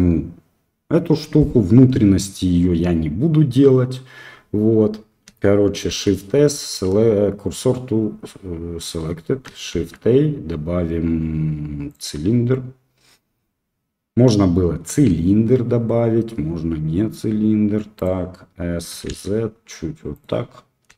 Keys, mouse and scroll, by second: 5.8 shift+s, 9.7 shift+a, 14.9 s, 18.8 s.